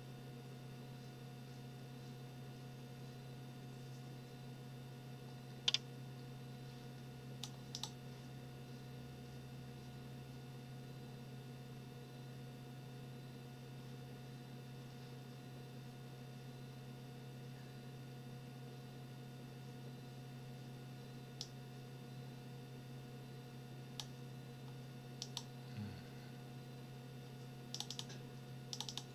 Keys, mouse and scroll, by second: 21.4-24.1 drag, 24.1-25.2 scroll up 1, 25.2 click, 27.7 click, 28.7 click.